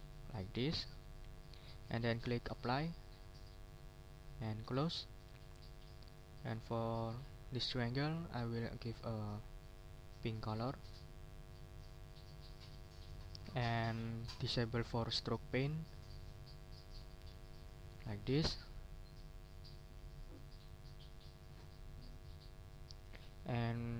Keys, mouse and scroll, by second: 1.5 click, 3.7 click, 4.6 click, 5.6 click, 9.7 scroll down 1, 11.9 click, 12.8 click, 13.9 click, 15.6 click, 17.0 click, 17.6 middle click, 18.0 click, 19.3 ctrl+scroll up 2, 20.6 click, 21.6 click, 22.9-23.5 scroll up 1, 23.7-23.9 scroll up 1.